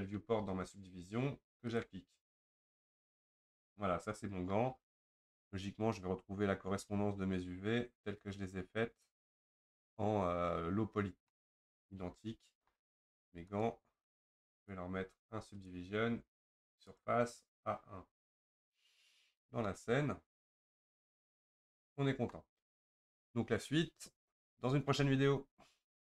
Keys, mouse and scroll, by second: 3.3 Tab, 3.8-13.1 middle drag, 13.1 Tab, 13.5 click, 14.7 click, 17.0-19.5 drag, 19.7-22.7 middle drag.